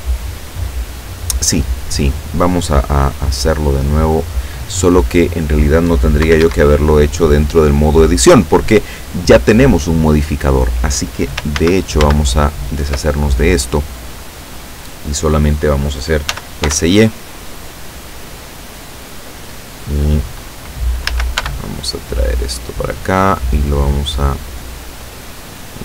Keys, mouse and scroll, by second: 6.3 Escape, 11.6 ctrl+z, 16.4 s, 16.7 y, 18.9 click, 21.1 a, 21.4 b, 22.1-23.2 drag, 23.9-25.8 drag.